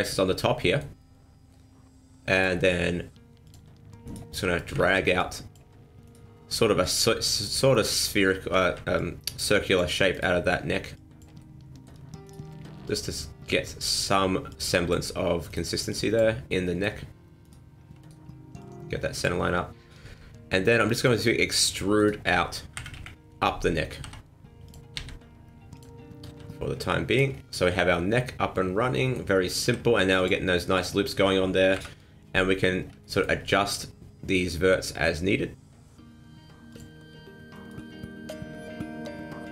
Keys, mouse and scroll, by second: 2.3 click, 3.4 click, 4.0 right click, 4.8 ctrl+z, 5.2 click, 6.0 right click, 6.8 click, 7.7 right click, 8.6 ctrl+z, 9.0 click, 10.1 right click, 10.9 click, 11.4 middle click, 12.2 right click, 12.8 click, 13.9 right click, 14.5 click, 15.5 right click, 15.9 click, 16.5 middle click, 17.4 right click, 18.0 shift+right click, 18.6 click, 21.0 click, 21.6 right click, 22.0 shift+right click, 22.7 KP_1, 22.9 KP_3, 24.0 e, 25.0 s, 26.3 g, 27.3 scroll down 4, 27.5 middle click, 29.6 ctrl+r, 31.7 KP_1, 32.6 scroll up 4, 33.0 shift+middle click, 33.4-34.8 scroll up 1, 34.8-35.7 scroll up 1, 36.7 click, 37.5 right click, 38.5 g.